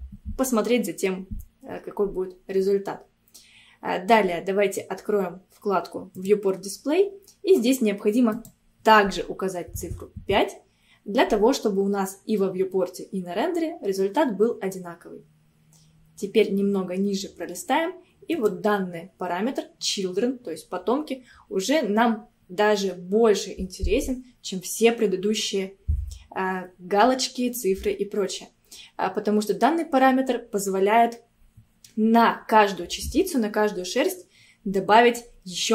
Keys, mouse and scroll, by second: 6.2 click, 6.9-8.4 scroll down 1, 8.4-11.4 drag, 15.7-16.4 scroll down 2, 18.4-21.5 drag, 29.4-31.6 scroll down 1.